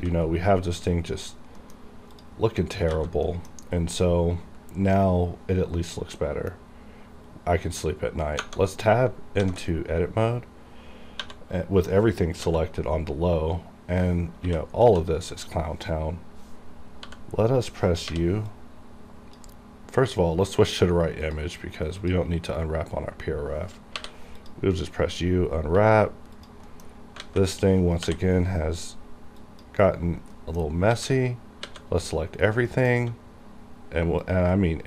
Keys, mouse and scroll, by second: 0.0 a, 0.3-1.3 scroll up 1, 1.6 middle click, 1.6 scroll down 1, 1.7 middle click, 1.8-2.2 scroll up 1, 2.2 click, 2.7-3.0 scroll down 1, 3.0 a, 3.3 middle click, 6.3 middle click, 6.8 scroll down 1, 9.4 alt+a, 11.3 1, 12.5 l, 14.9 a, 15.5 right click, 17.0 g, 17.6 right click, 18.0 u, 18.6-20.5 drag, 20.5 scroll down 1, 21.3 click, 22.6 scroll up 1, 24.0 u, 24.5 click, 25.3 scroll down 1, 25.7 g, 26.4 click, 26.7 middle click, 26.9 scroll up 1, 27.3 alt+a, 28.1 l, 29.5 click, 29.5 click, 30.4 middle click, 30.6 scroll down 1, 31.0 a, 31.7 a, 32.5 scroll down 1, 32.8 middle click, 33.0 a, 34.2 click.